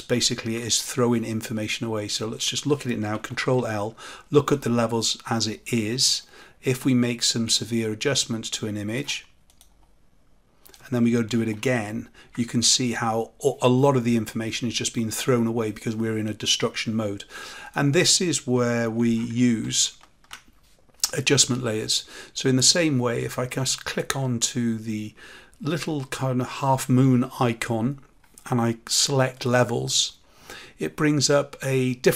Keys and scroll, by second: 3.3 ctrl+l, 11.3 ctrl+l, 19.6 ctrl+alt+z.